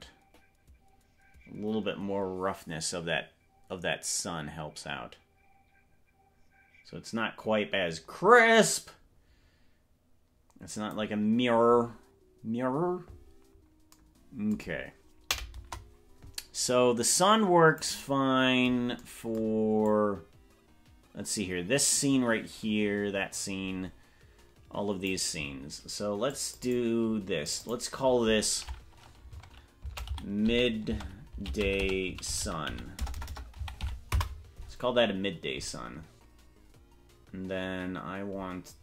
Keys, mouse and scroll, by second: 15.6 KP_0, 16.8-18.0 drag, 20.0-25.4 drag, 26.3 click, 26.7 click, 27.4 click, 27.9-34.6 drag, 33.2 BackSpace, 33.4 BackSpace.